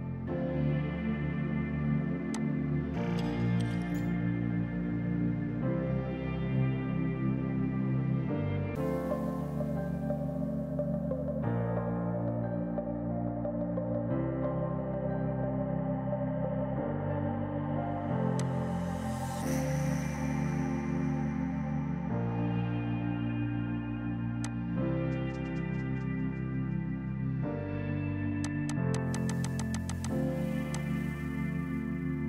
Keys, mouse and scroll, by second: 2.4 click, 24.0 space, 24.4 click, 28.5 click.